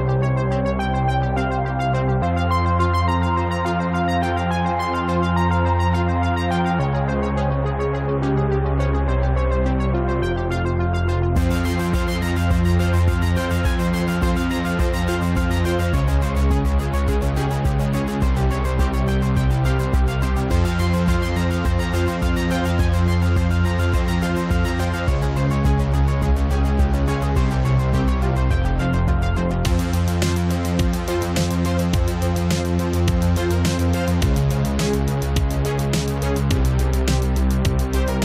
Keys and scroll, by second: 4.3 space, 21.2 ctrl+z, 27.7 Delete, 28.6 ctrl+c, 28.7 ctrl+v.